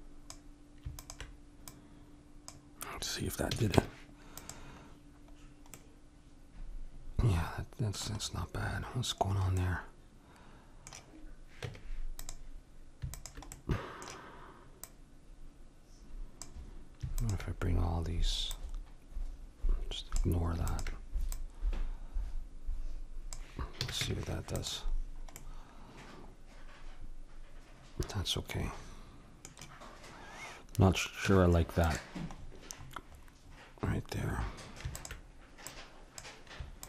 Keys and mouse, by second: 3.5 a, 3.7 Tab, 4.9-7.6 middle drag, 8.2-11.7 middle drag, 11.7 Tab, 13.1-20.0 drag, 13.5-16.4 middle drag, 23.8 a, 24.0 Tab, 25.4-27.2 middle drag, 31.3 Tab, 32.8-35.0 middle drag, 35.0-36.8 drag.